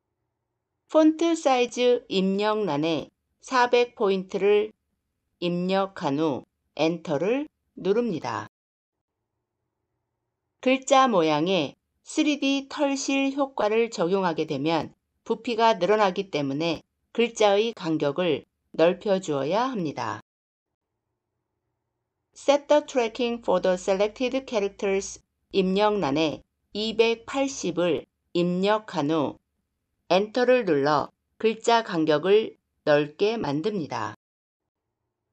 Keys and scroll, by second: 6.6 Return, 29.8 Return.